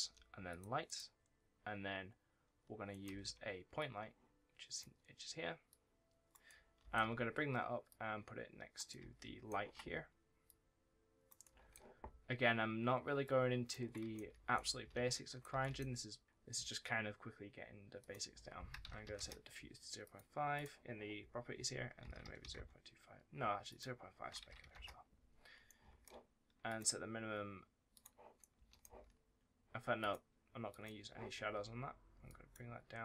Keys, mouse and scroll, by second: 0.3 click, 0.7 right click, 2.9 right click, 3.0 s, 3.6 click, 6.3 right click, 6.4 d, 6.7 w, 7.7 click, 8.9 d, 10.3 click, 11.3 right click, 11.4 a, 13.1 click, 14.0-15.4 typing, 15.5 right click, 16.2 scroll down 1, 17.9 click, 18.6 KP_0, 18.9 KP_5, 19.0 KP_Enter, 19.9 click, 21.8 KP_0, 22.1 KP_2, 22.4 KP_Enter, 23.5 click, 24.2 KP_0, 24.3 KP_Decimal, 24.5 KP_5, 24.6 KP_Enter, 25.5 right click, 25.7 a, 26.5 click, 28.3 right click, 28.4 w, 29.0 scroll down 1, 29.9 click.